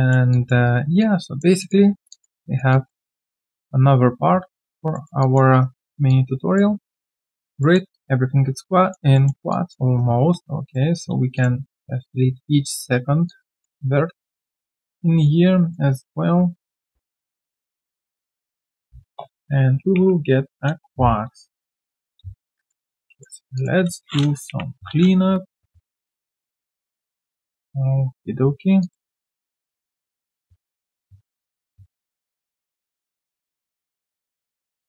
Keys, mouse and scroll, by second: 0.3 alt+click, 0.6 alt+right click, 1.0 alt+click, 1.8 alt+scroll down 4, 2.1 alt+click, 2.4 alt+right click, 2.7 alt+click, 3.1 alt+middle click, 3.4 alt+click, 4.9 alt+middle click, 5.2 alt+click, 5.5 alt+right click, 5.7 alt+middle click, 6.1 alt+click, 7.6 alt+middle click, 7.9 alt+click, 9.1 alt+middle click, 9.5 alt+click, 9.9 right click, 9.9 q, 11.3 shift+click, 13.2 alt+click, 17.4 shift+click, 22.6 shift+click, 29.5 shift+click, 32.7 shift+click, 33.8 shift+click.